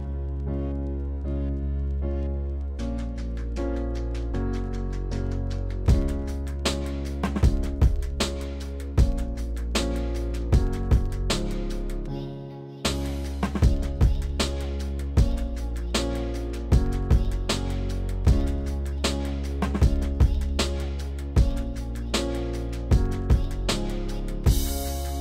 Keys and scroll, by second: 9.0 3, 16.0 s, 22.3 s.